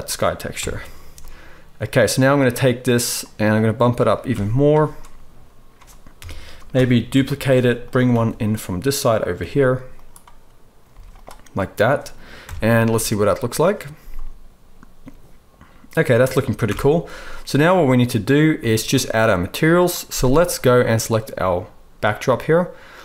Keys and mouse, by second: 0.5 KP_0, 3.3 click, 6.1 KP_1, 6.2-7.8 middle drag, 7.0 shift+d, 7.8-9.3 right drag, 8.0 r, 9.3-15.0 drag, 9.3 g, 10.8 z, 12.3 KP_0, 12.9 z, 15.0-20.6 right drag, 16.6 shift+Left, 18.5 z, 20.5-23.0 drag, 20.5 middle click.